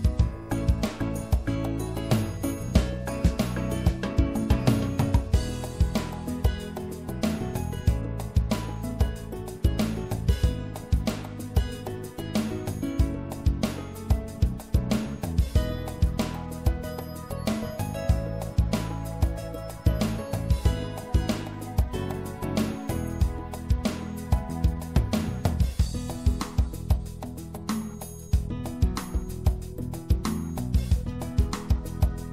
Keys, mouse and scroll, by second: 0.9 right click, 2.3-4.3 middle drag, 3.2 w, 6.3 ctrl+z, 9.7 w, 12.3-16.4 right drag, 27.9 i.